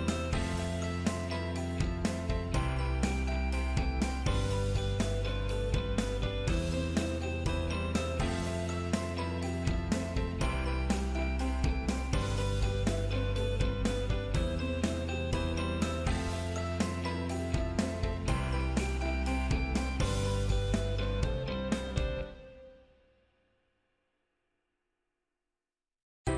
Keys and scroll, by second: 1.4 ctrl+Left, 2.0 ctrl+Down, 11.3 ctrl+Up.